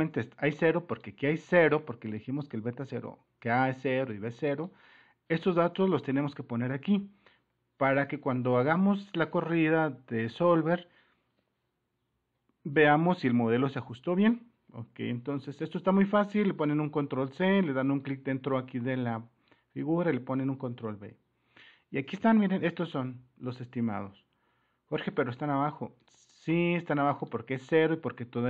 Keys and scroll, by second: 16.6 ctrl+c, 20.6 ctrl+v, 25.0 Escape.